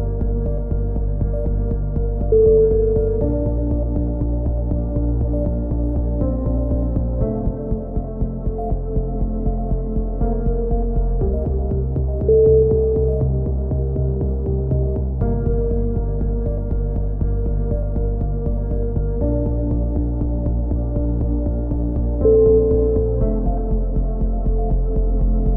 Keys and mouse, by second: 0.0 right click, 0.6 click, 3.3-7.1 middle drag, 5.2 right click, 7.1 click, 9.6-11.0 right drag, 10.5 middle click, 11.0-12.2 middle drag, 12.2 click, 12.5-14.0 middle drag, 14.0 right click, 14.5 click, 16.0-17.6 right drag, 17.4 click, 18.7 click, 19.4 middle click, 19.4 right click, 19.6 right click, 19.9 click, 22.3 a, 23.3 middle click, 23.9-25.2 drag, 25.0 right click, 25.2 middle click.